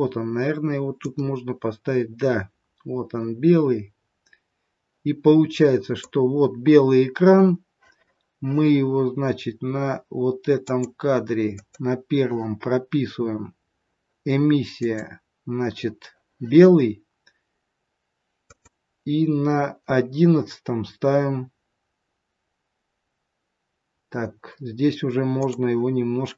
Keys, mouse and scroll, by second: 10.6 click, 11.5 click, 14.8 click, 18.5 click, 25.2 click.